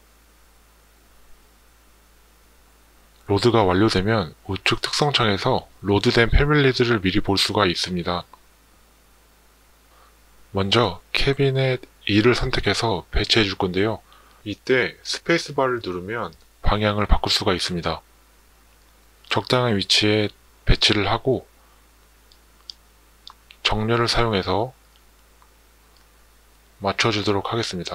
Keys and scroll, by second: 15.2 space, 21.0 Escape, 22.6 Escape, 26.8 Tab.